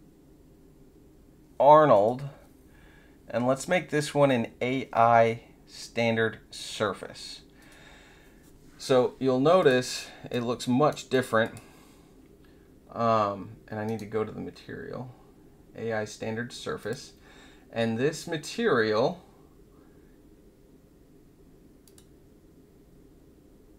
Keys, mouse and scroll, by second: 1.9 click, 7.5 click, 9.5 click, 10.3-11.1 right drag, 11.1 click, 11.4 click, 13.8 right click, 16.7 click, 21.8 click.